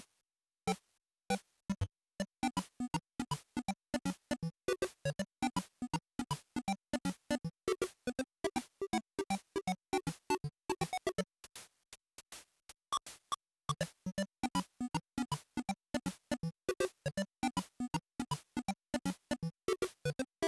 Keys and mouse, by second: 6.8-8.1 drag, 14.7-20.4 drag.